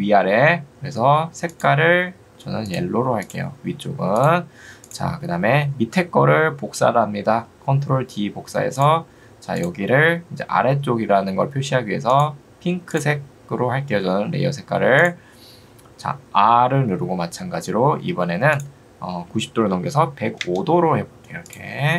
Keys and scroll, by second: 17.0 r, 20.0 0, 20.4 Return.